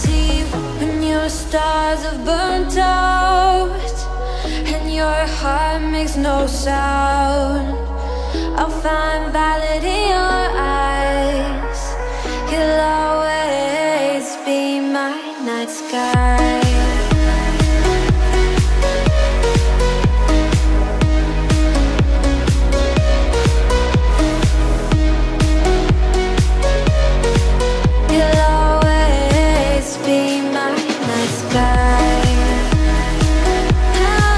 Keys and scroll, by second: 2.5 ctrl+j, 6.5 ctrl+j, 11.4 ctrl+j, 17.2 ctrl+j, 26.2 ctrl+t.